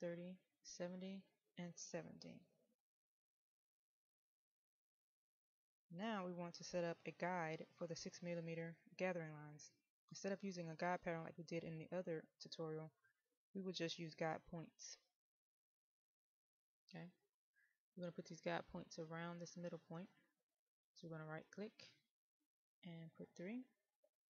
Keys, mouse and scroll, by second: 16.4-17.1 scroll down 1, 17.1 middle click, 18.3-20.6 scroll down 1.